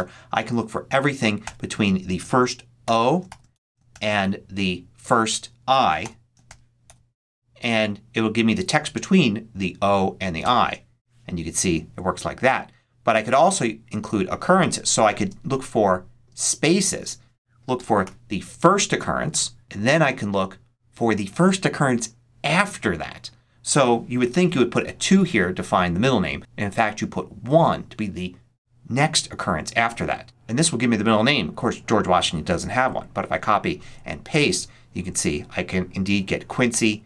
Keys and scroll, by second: 1.3 shift+', 2.5-4.3 typing, 5.9 i, 6.7 shift+0, 10.3 Return, 15.1 space, 17.2 space, 17.6 ', 17.9 1, 19.1 ', 24.6 2, 26.2 BackSpace, 27.3 1, 32.5 super+c, 33.7 super+v.